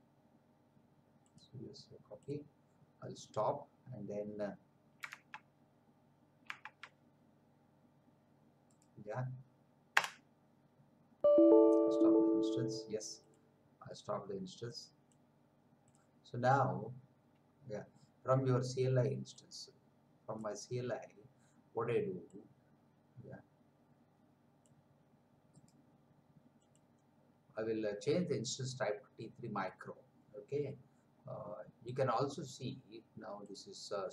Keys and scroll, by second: 5.3 alt+Tab, 6.6 alt+Tab, 10.0 Return.